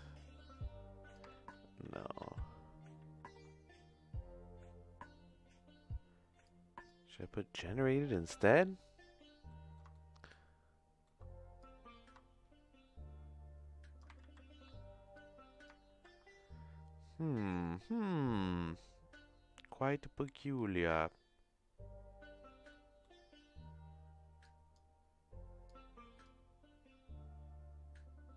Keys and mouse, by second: 1.4 ctrl+z, 1.8 ctrl+z, 2.2 ctrl+z, 3.0 ctrl+z, 6.4 click, 9.4 middle click, 9.9-11.0 shift+middle drag, 11.6-14.0 drag, 14.2 ctrl+z, 15.2 click, 15.8 ctrl+z, 20.5 middle click, 22.8 middle click, 24.4 click, 25.7 click.